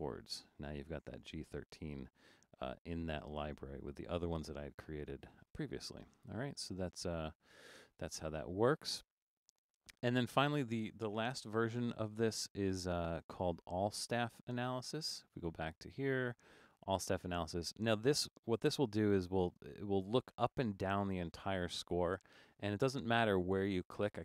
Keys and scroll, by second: 11.3 BackSpace.